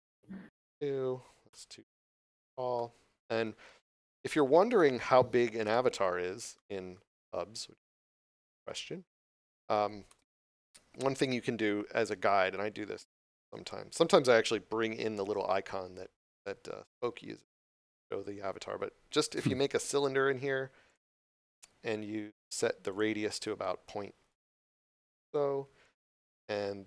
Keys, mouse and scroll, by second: 1.4 Return, 2.7 middle click, 4.3 shift+z, 4.8 shift+middle click, 5.5 Tab, 6.0 scroll up 1, 6.4 middle click, 6.9 scroll down 1, 7.8 middle click, 8.9 scroll up 1, 10.0 shift+a, 19.3 click, 24.5 Return.